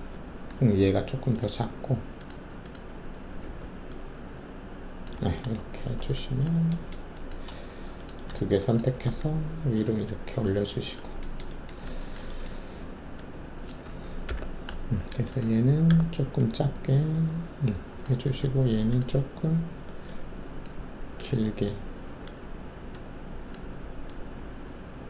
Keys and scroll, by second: 3.4 r, 5.8 alt+shift+q, 9.0 alt+shift+w, 14.2 alt+5, 15.9 r.